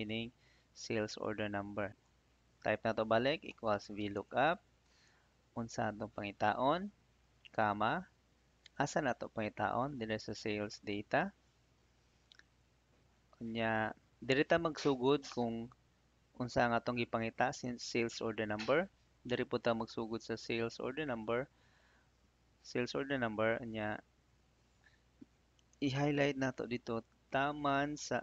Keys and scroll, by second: 3.4 =, 4.0 Tab, 7.1 '.